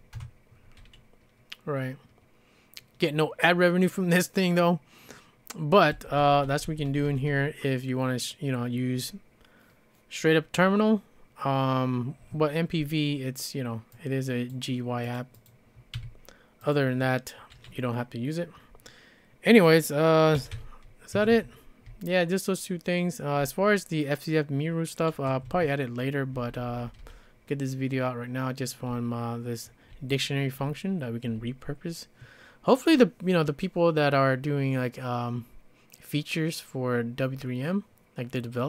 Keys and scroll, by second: 0.2 Return, 5.9-7.5 typing, 16.0 q, 20.1-23.4 typing, 21.1 Escape, 21.3 Escape, 25.3 Escape, 26.4 k, 26.6 k, 26.8 k, 27.0 k, 28.9-31.3 typing.